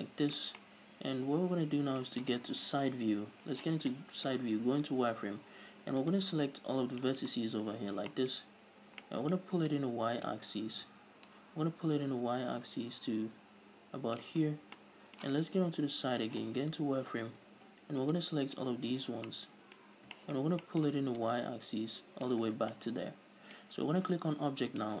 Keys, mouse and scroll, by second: 0.9-6.3 middle drag, 3.0 KP_3, 3.9 z, 4.7-6.3 scroll up 2, 6.3 scroll up 1, 6.3 right click, 6.7 click, 7.6 scroll down 2, 8.2 z, 8.4-10.0 middle drag, 8.7-9.1 scroll up 2, 9.1 scroll down 2, 10.0 click, 11.2 ctrl+z, 11.6-15.1 drag, 14.7-15.1 scroll down 2, 15.1 middle click, 16.0 KP_3, 16.7 z, 16.9-17.6 scroll up 2, 17.6 middle click, 17.6 a, 18.5 click, 19.3 z, 19.6-21.5 middle drag, 20.2 scroll up 2, 21.5-23.0 drag, 22.8 middle click, 22.8 scroll down 2, 22.9 Tab, 23.0-25.0 middle drag.